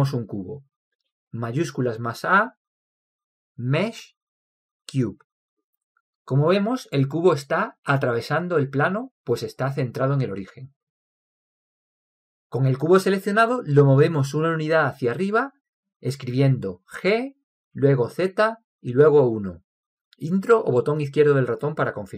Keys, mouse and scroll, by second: 0.3-1.9 middle drag, 1.9 shift+a, 6.3-7.9 middle drag, 8.5-8.9 middle drag, 12.1-17.4 middle drag, 17.4 g.